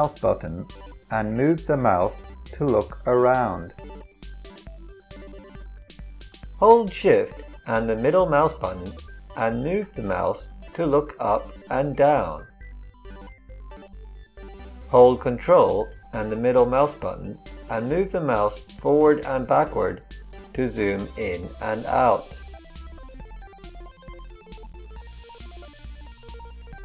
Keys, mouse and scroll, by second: 14.1-14.7 middle drag, 14.7-16.1 drag.